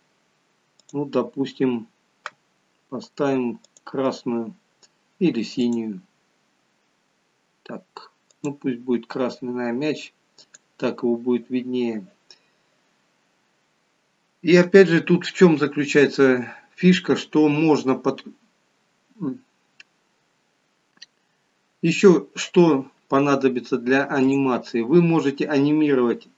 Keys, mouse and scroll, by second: 24.2 click, 25.6 scroll up 2.